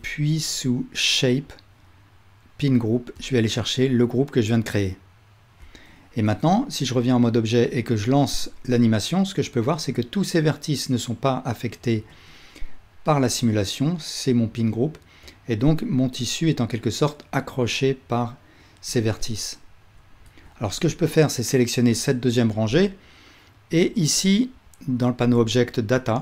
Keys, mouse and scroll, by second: 1.3-11.3 middle drag, 6.3 Tab, 8.3 space, 12.2 space, 15.7 space, 18.8 space, 20.3 Tab, 20.9-23.9 alt+drag.